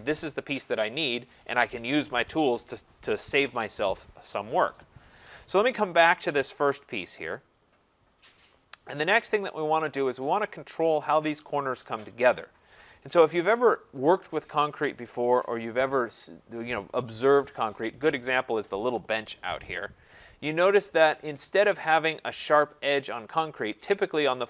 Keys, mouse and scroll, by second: 5.8-6.5 scroll down 3, 6.5-7.2 scroll up 7, 8.1 scroll, 8.3 right click, 9.4 scroll, 12.9-13.4 scroll, 13.9 right click, 14.5-17.3 scroll, 21.6 scroll, 22.3 scroll.